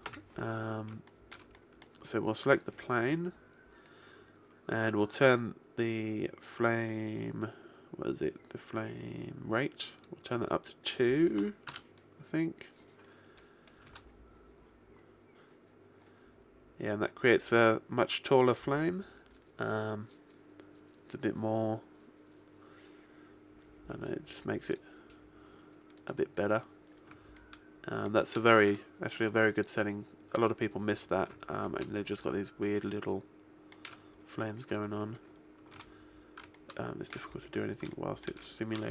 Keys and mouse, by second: 0.0 Escape, 8.6-12.4 drag, 13.4 click, 13.8 alt+a, 19.9-27.5 middle drag, 27.5-28.5 right drag, 29.9 middle click, 30.7-31.8 right drag, 33.5 middle click, 35.9 alt+a, 37.1 middle click, 38.3 middle click.